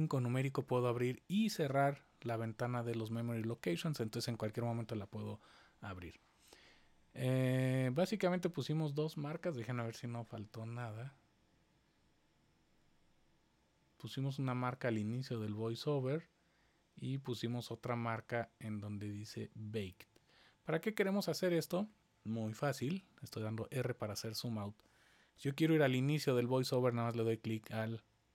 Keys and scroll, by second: 1.6 super+5, 2.2 super+5, 3.4 super+5, 22.4-23.2 typing, 25.3 super+5.